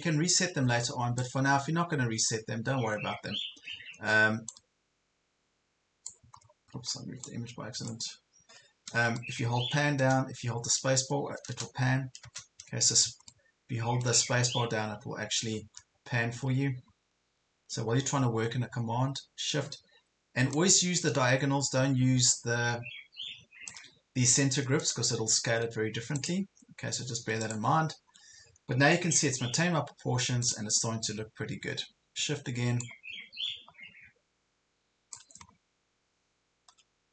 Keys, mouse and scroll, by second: 1.8 ctrl+scroll up 1, 4.5-6.2 drag, 6.4 ctrl+scroll down 1, 7.2-8.8 drag, 9.2 middle click, 10.4-10.7 scroll up 1, 11.8-12.8 typing, 13.3-14.8 middle drag, 14.8 scroll up 1, 15.3 scroll down 1, 15.8 ctrl+scroll up 1, 16.9 ctrl+scroll up 1, 17.4 ctrl+scroll down 1, 18.1 ctrl+scroll down 1, 20.6-23.7 shift+drag, 24.8 click, 25.2 ctrl+scroll down 1, 26.2 click, 27.0 ctrl+scroll down 1, 27.4 click, 28.6 ctrl+scroll down 1, 29.4 ctrl+scroll up 1, 30.4 ctrl+click, 32.8-35.4 shift+drag, 35.5 ctrl+scroll up 1.